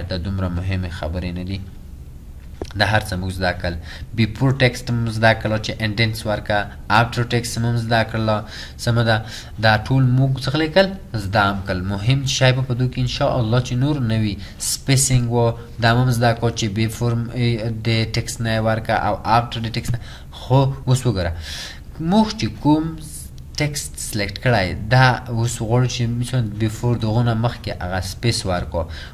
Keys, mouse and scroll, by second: 28.2 double click.